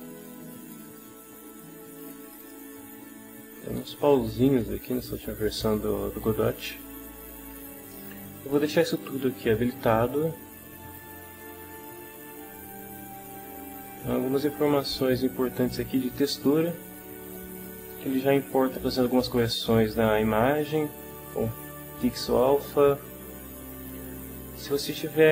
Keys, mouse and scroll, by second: 0.7 click, 2.0 click, 4.4 click, 25.0-25.3 drag.